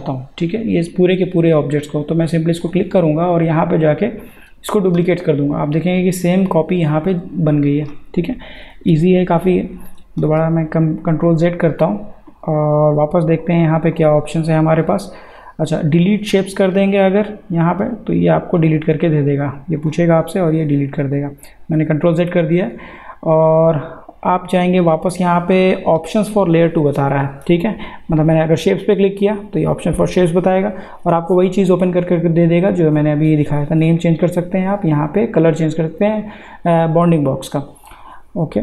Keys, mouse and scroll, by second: 2.6 click, 10.0 click, 10.3 ctrl+z, 12.3 click, 21.0 ctrl+z, 22.6 click, 27.2 click, 37.0 click.